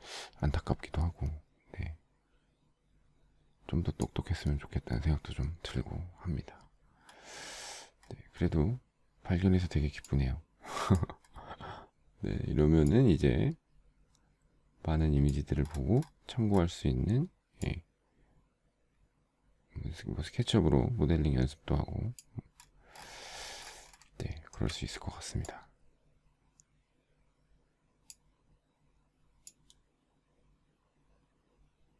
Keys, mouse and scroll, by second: 24.3 shift+middle click.